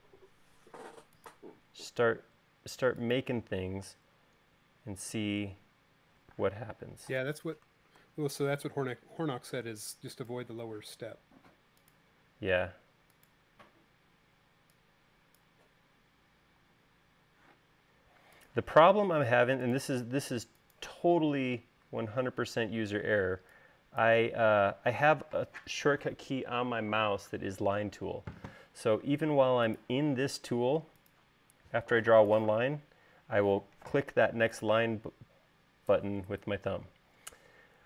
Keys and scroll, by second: 0.4 l, 4.1 l, 6.6 space, 8.2 super+z, 14.6 e, 16.9 l, 22.9 e.